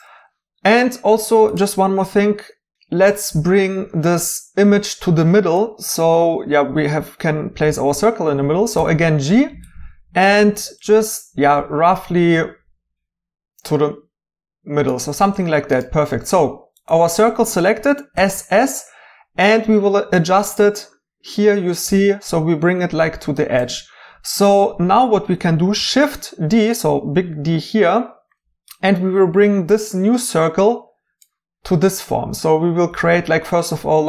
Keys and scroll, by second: 9.6 g, 18.1 typing, 25.8 d.